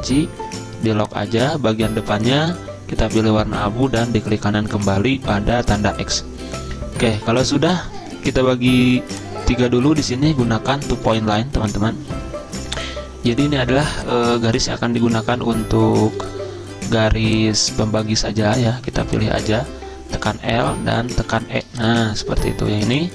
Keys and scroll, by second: 7.1 z, 20.0 l, 21.2 e.